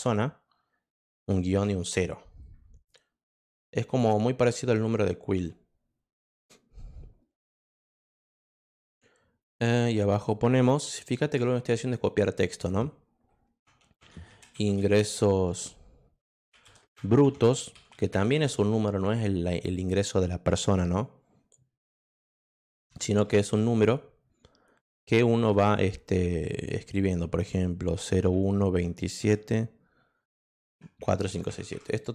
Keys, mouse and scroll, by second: 0.0-0.4 typing, 1.5 0, 3.4 click, 5.4-8.5 drag, 9.4 click, 11.1 shift+Return, 14.0-15.2 typing, 16.4-18.9 typing, 22.7 ., 25.4 ., 27.9 0, 28.3 1, 29.2 7, 30.9 3.